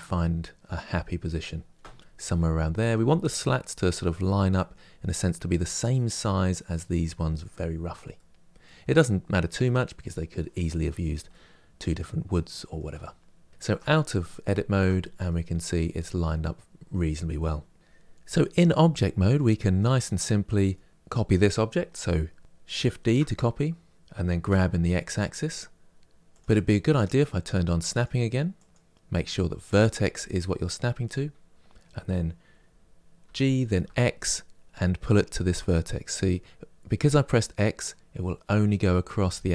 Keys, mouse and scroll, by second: 2.1-7.1 middle drag, 7.1-7.9 scroll up 2, 7.9-13.5 middle drag, 13.5 Tab, 14.0-15.5 shift+middle drag, 15.5 scroll down 2, 15.6 scroll up 1, 15.7 scroll down 1, 19.9-22.7 middle drag, 22.7 shift+d, 27.6 click, 33.5 g.